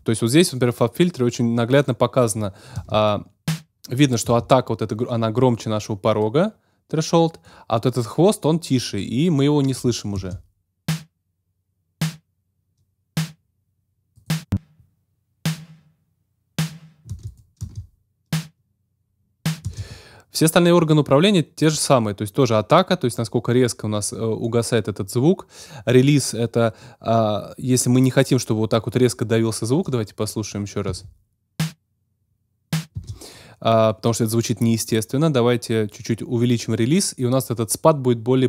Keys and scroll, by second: 2.7 space, 4.2 space, 10.1 space, 17.0 space, 30.8 space, 32.9 space.